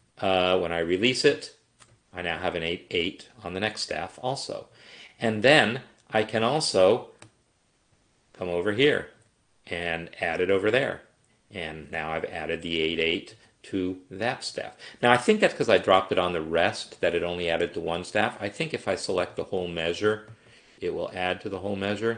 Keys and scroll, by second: 15.3 ctrl+z.